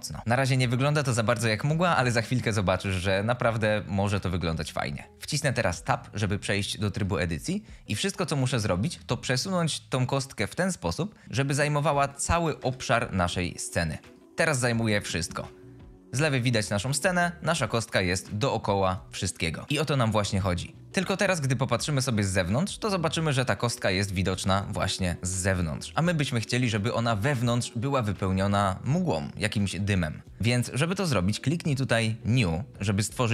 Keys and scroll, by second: 5.8 Tab, 8.4 g, 8.8 y, 12.3 g, 12.6 y, 19.6 Tab.